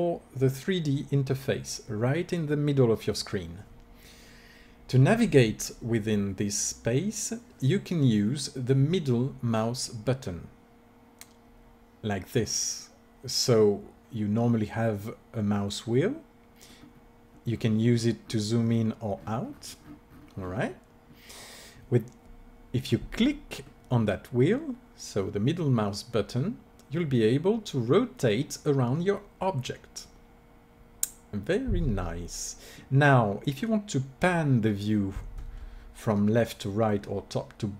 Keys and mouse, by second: 10.4-11.9 middle drag, 16.9 middle click, 17.9-21.2 middle drag.